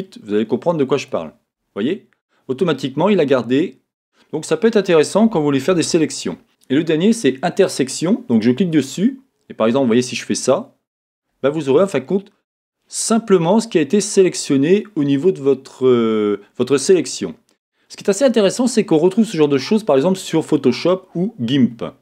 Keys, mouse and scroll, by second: 5.7 z, 8.3 click, 9.7-22.0 drag.